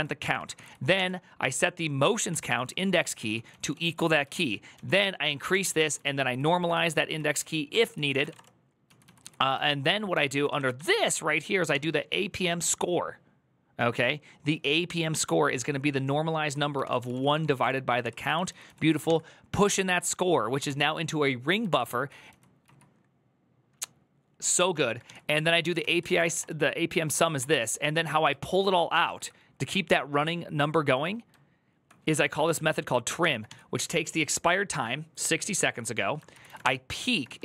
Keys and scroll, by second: 0.0-1.2 typing, 2.0 ctrl+c, 2.3-10.3 typing, 5.3 ctrl+c, 7.6 ctrl+c, 11.5 shift+v, 16.6 ctrl+c, 16.7-18.8 typing, 17.8 ctrl+c, 20.4 ctrl+c, 21.5 ctrl+c, 22.0-22.4 typing, 24.5-27.7 typing, 25.6 ctrl+c, 27.7 ctrl+d, 28.4 ctrl+u, 30.5 typing, 31.9-32.2 typing, 33.0 ctrl+c, 33.3 shift+v, 36.0-37.4 typing.